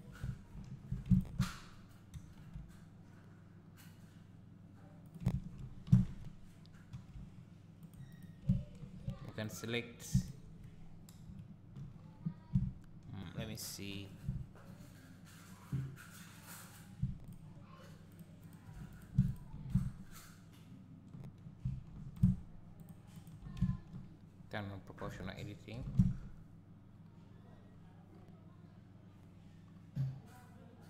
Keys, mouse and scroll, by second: 0.7 2, 1.1 alt+click, 2.1 ctrl+b, 5.1 right click, 6.0 ctrl+x, 6.9 ctrl+r, 8.2 right click, 9.0 1, 9.4 click, 10.1 shift+click, 11.2 KP_Decimal, 11.9-12.5 scroll down 1, 12.5 `, 13.2-14.0 scroll down 1, 14.3 `, 14.9-16.0 scroll down 1, 16.6 click, 17.3 shift+click, 18.1 shift+click, 18.4 shift+click, 18.9 click, 19.3 shift+click, 19.8 `, 22.2 click, 22.8 shift+click, 23.2 shift+click, 23.6 `, 25.1 o, 25.8 g.